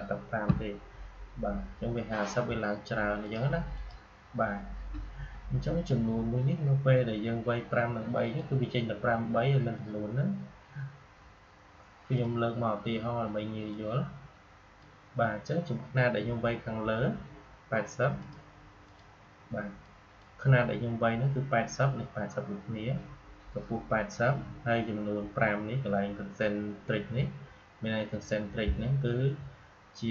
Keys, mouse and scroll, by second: 3.1 click, 8.1 click, 12.1-17.2 drag, 18.1-22.7 drag.